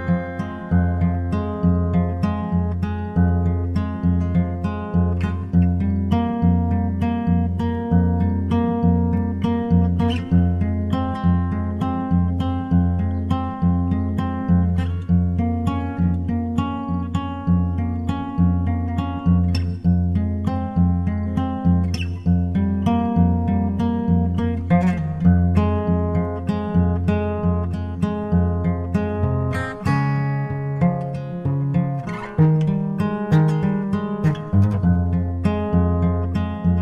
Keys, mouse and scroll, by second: 4.8-6.4 drag, 8.2-11.2 drag, 11.8-13.3 drag, 22.1-23.8 middle drag, 24.6 s, 24.7 s, 27.7-29.4 drag, 28.1 KP_1, 28.1 KP_1, 30.6 g, 31.6 g.